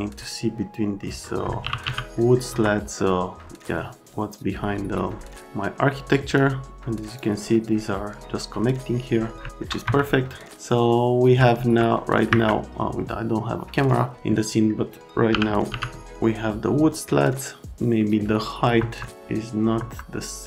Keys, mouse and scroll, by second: 1.0 middle click, 1.4-2.3 typing, 2.2 middle click, 2.5 F3, 6.3 click, 9.5 alt+middle click, 9.8 F3, 10.3 middle click, 10.5 middle click, 11.6 x, 12.3 Escape, 15.3 p, 17.2 right click, 18.7 F3, 19.8 F3.